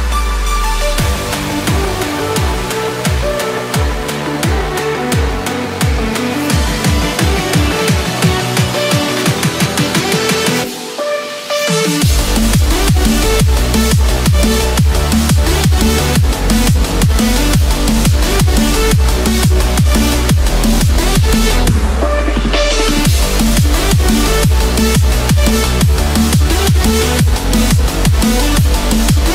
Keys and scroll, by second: 0.8 ctrl+=, 4.1 ctrl+-, 25.9 ctrl+-, 26.1 ctrl+0.